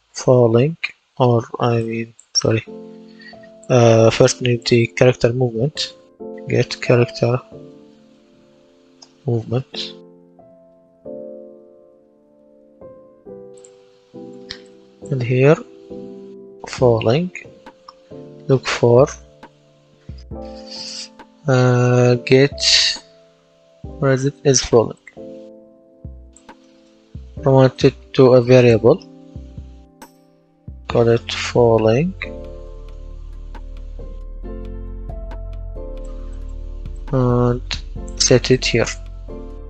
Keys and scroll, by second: 0.0-1.0 typing, 5.5-9.4 typing, 15.2-18.2 typing, 29.8-33.0 typing, 33.5 Return.